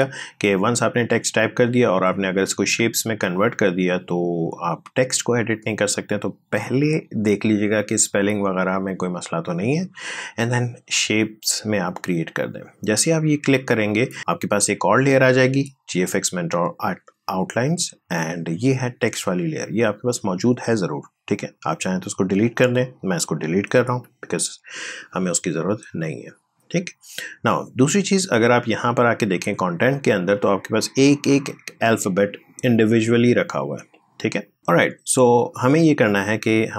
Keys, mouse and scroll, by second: 11.8 click, 19.0 click, 23.6 Delete, 27.7 click, 31.5 scroll down 1, 34.2 click.